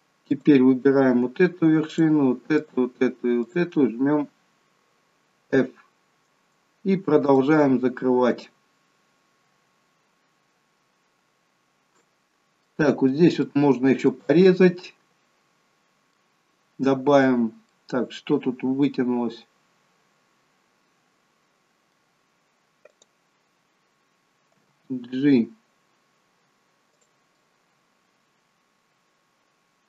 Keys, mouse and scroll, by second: 0.3 click, 1.9 shift+click, 2.5 shift+click, 3.5 shift+click, 5.5 f, 7.3 click, 8.3 shift+click, 12.3-12.7 scroll up 2, 12.6 middle click, 13.4 middle click, 14.7 middle click, 17.6 middle click, 22.9 click, 24.6 g, 27.4 middle click.